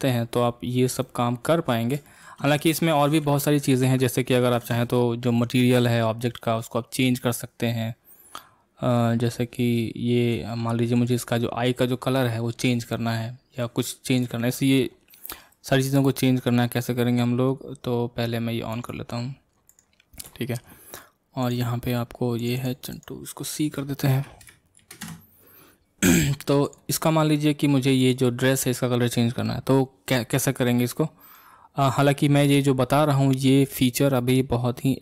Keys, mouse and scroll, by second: 0.3-1.1 scroll up 2, 1.1-2.3 middle drag, 3.7 ctrl+space, 4.6 space, 7.0-10.0 middle drag, 11.1 click, 11.5 scroll up 1, 14.2 click, 18.7 click, 22.6-28.1 drag, 30.6 scroll up 1, 30.7-31.6 middle drag, 31.6-31.9 scroll down 2, 31.9-35.0 middle drag.